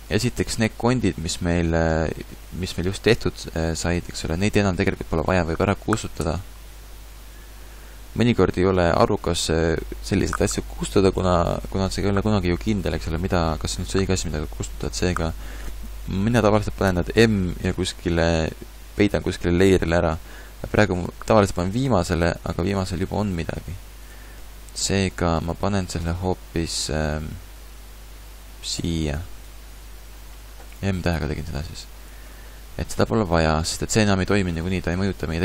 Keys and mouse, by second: 2.6 g, 6.2 x, 17.2 m, 21.8-27.0 drag, 26.0 m, 31.2-32.6 drag, 32.6 middle click.